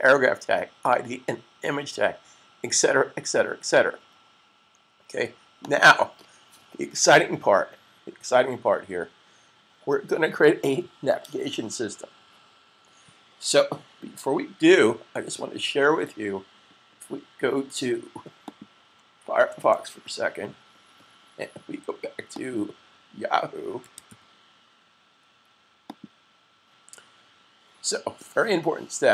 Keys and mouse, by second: 5.5 click, 18.3 click, 19.3 super+n, 22.3 click, 23.5 y, 25.5-27.5 typing, 25.7 click.